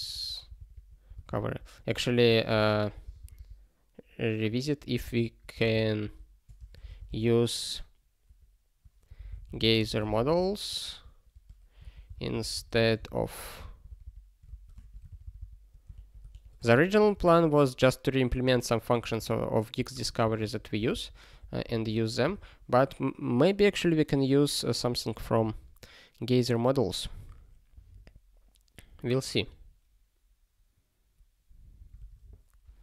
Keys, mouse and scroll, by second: 0.0-2.5 typing, 3.0 alt+b, 3.1 alt+b, 3.3 alt+b, 4.5 alt+f, 5.0 alt+b, 5.3-13.5 typing, 13.8 alt+b, 14.0 alt+b, 14.7 ~, 15.0 alt+b, 15.2 alt+b, 15.4 alt+b, 15.9 alt+f, 16.6 ~, 17.4 ctrl+s, 18.3 click, 19.1 ctrl+e, 19.7 ., 20.5 ctrl+s, 20.8 ctrl+n, 21.4 ctrl+p, 21.6 ctrl+a.